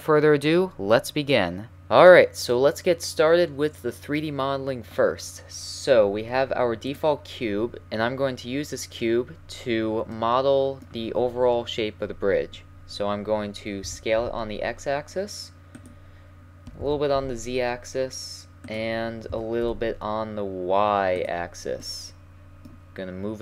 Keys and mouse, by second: 6.9-8.9 right drag, 8.6-12.0 middle drag, 13.8 middle click, 13.8 s, 16.8 s, 19.3 s.